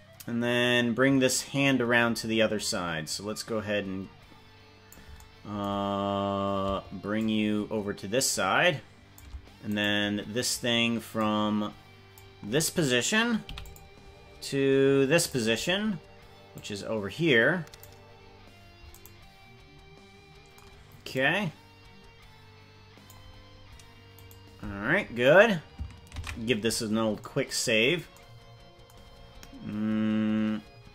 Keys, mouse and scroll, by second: 1.3-4.9 drag, 5.9-6.3 scroll down 3, 7.1-9.2 shift+drag, 9.8 right click, 11.1-12.1 drag, 13.6 i, 14.4 click, 16.5-18.0 drag, 18.2-18.8 scroll up 6, 19.0-20.6 right drag, 21.1-23.1 drag, 24.3 right click, 27.8 ctrl+s.